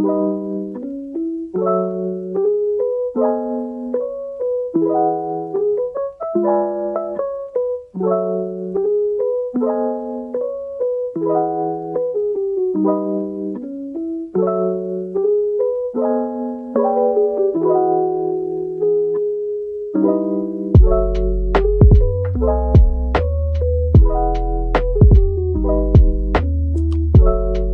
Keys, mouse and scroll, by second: 0.4 typing, 1.0 shift+double click, 1.4 shift+click, 2.5-3.3 typing, 5.1 typing, 9.3-9.7 scroll up 1, 10.3 typing, 13.0-13.8 typing, 14.6 middle click, 18.1 scroll down 1, 19.8 middle click, 22.2 scroll down 1, 23.5 typing.